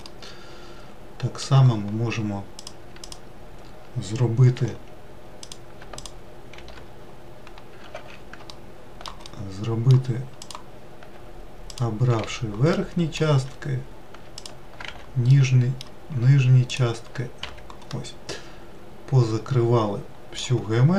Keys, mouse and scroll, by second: 0.1-2.6 middle drag, 2.6 click, 3.0 alt+click, 4.6 f, 5.4 click, 6.0 alt+click, 6.5 alt+e, 7.9 ctrl+z, 8.5 alt+middle click, 9.2-10.4 middle drag, 10.4 click, 11.7 alt+click, 12.2 f, 12.7-14.4 middle drag, 14.4 alt+click, 14.9 f, 15.3-16.7 middle drag, 16.7 alt+click, 17.4 f, 17.9-20.6 middle drag, 20.6-20.9 scroll down 4.